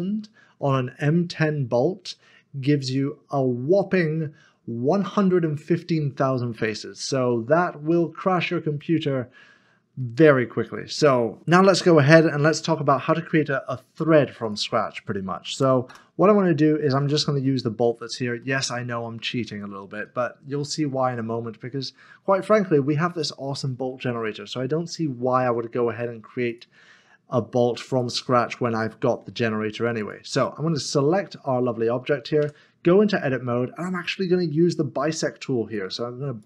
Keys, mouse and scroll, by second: 2.8 Return, 6.6 click, 7.2 middle click, 12.6 F9, 14.4 click, 15.4 typing, 15.9 Return, 16.9 click, 17.4 middle click, 19.6-19.9 scroll up 1, 20.0 shift+middle click, 26.5 click, 30.4 double click, 32.4 Tab, 34.8 click.